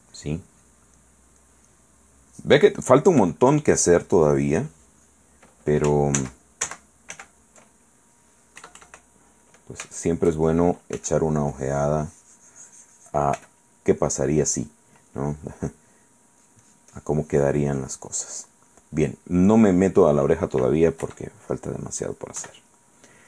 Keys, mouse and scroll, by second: 3.4 f, 3.7-5.5 drag, 6.4 ctrl+z, 8.8 KP_Add, 9.7 middle click, 10.2 shift+middle click, 11.1 f, 11.4-13.5 drag, 13.6 f, 14.2 click, 15.8 click, 16.6-18.9 drag, 18.9 middle click, 19.6 middle click, 21.2 KP_Add, 22.6 KP_1.